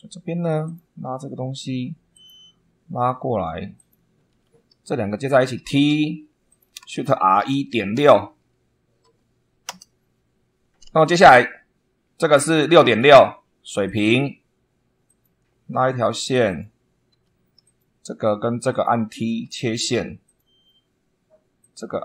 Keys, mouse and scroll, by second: 0.6 click, 2.0 click, 3.7 click, 4.2 Escape, 4.8 click, 5.5 t, 6.4 click, 6.8 shift+r, 7.3 shift+1, 7.9 ., 9.0 6, 12.8 2, 13.8 click, 15.0 click, 16.4 click, 17.0 Escape, 17.6 click, 18.6 click, 19.2 t, 20.2 click, 21.5 click.